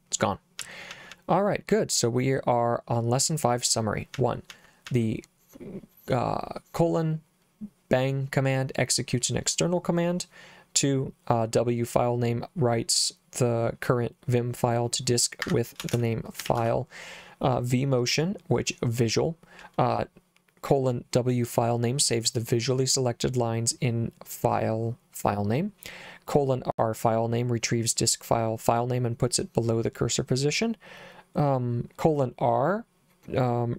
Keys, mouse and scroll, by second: 0.7 j, 0.9 j, 1.2 j, 4.2 j, 4.6 j, 4.9 j, 15.5 Escape, 15.9 shift+;, 16.5 w, 16.6 Return.